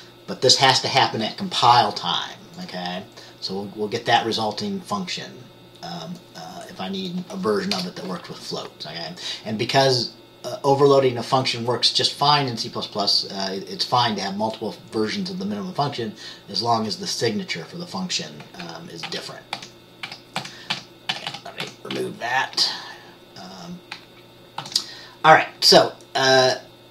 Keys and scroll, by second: 0.0-1.1 typing, 7.9 BackSpace, 19.2 ctrl+z, 19.6 ctrl+z, 20.2 ctrl+z, 20.5 ctrl+z, 20.8 ctrl+z, 21.2 ctrl+z, 21.7 ctrl+z, 22.0 ctrl+z, 24.7 ctrl+s.